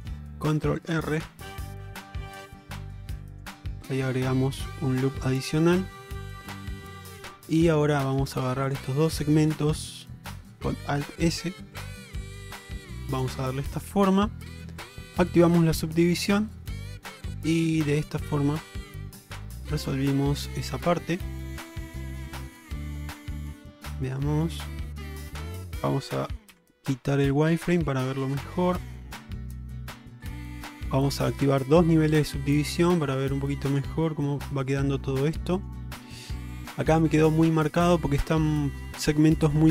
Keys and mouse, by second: 2.4 ctrl+r, 4.2-5.2 middle drag, 5.7 shift+middle click, 7.0 middle click, 7.5 click, 8.0 middle click, 8.7 shift+click, 9.0 middle click, 10.1 alt+middle click, 11.2 alt+s, 14.0 middle click, 15.2 click, 15.6-18.7 middle drag, 19.8 shift+middle click, 20.4-21.1 middle drag, 21.3 shift+middle click, 22.0 shift+middle click, 22.4-24.9 middle drag, 25.2 shift+middle click, 26.6 q, 28.5 Tab, 29.2 click, 29.6-30.4 middle drag, 32.2 click, 33.8 click, 34.3-35.7 middle drag, 36.7 shift+middle drag.